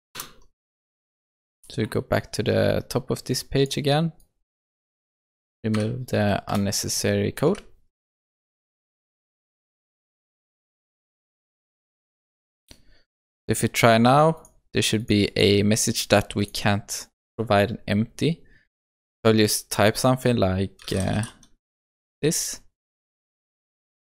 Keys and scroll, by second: 5.8 Insert, 9.8 ctrl+s.